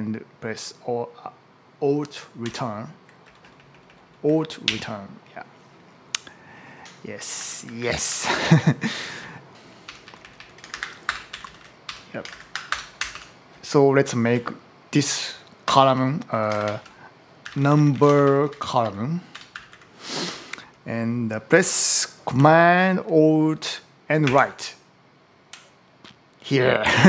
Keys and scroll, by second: 2.2 alt+Up, 3.1 Right, 4.5 alt+Return, 7.1-8.0 typing, 8.5 Right, 9.7 Up, 9.8 Right, 10.5 alt+shift+Left, 10.9 BackSpace, 11.1 Down, 11.7 Up, 12.1 alt+shift+Right, 12.5 BackSpace, 12.8 Up, 14.2 Down, 15.5 Up, 16.1 Left, 16.4 alt+shift+Right, 17.0-20.0 typing, 20.1 Left, 24.1 alt+super+Right.